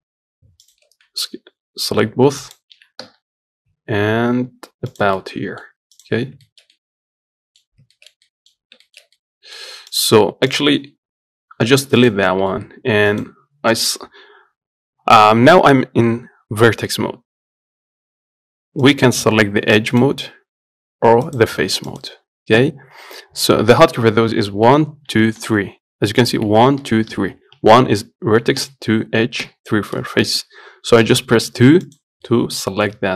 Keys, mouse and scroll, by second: 0.9 shift+click, 1.3 s, 5.5 middle click, 5.9 scroll down 1, 6.2 click, 6.5 scroll up 1, 6.7-8.0 shift+middle drag, 8.0 scroll up 1, 8.2 shift+middle click, 8.8 scroll up 1, 9.1 shift+middle click, 9.9 scroll up 1, 10.2 click, 10.8-12.0 drag, 12.0 Delete, 12.3 click, 12.5 middle click, 12.9 Tab, 13.4 click, 19.1 click, 20.2 click, 21.5 click, 22.2 click, 32.1 click, 32.5-33.1 middle drag.